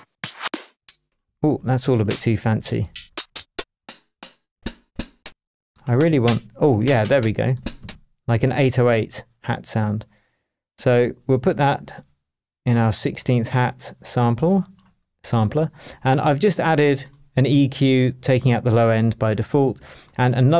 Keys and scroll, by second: 1.2 Left, 2.6 Down, 4.5 Down, 6.2 Up, 7.8 Down.